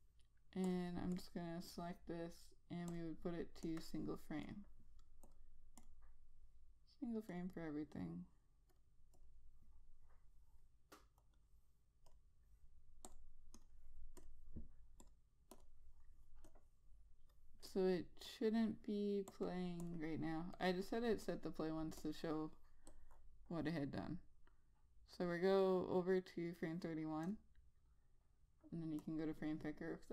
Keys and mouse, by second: 27.8 click.